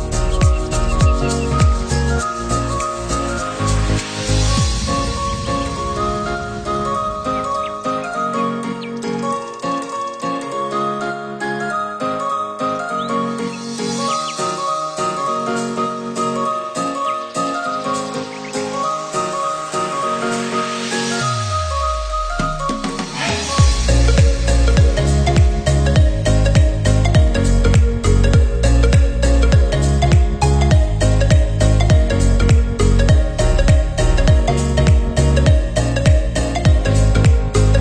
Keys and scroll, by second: 17.7 Down, 29.5 ctrl+0.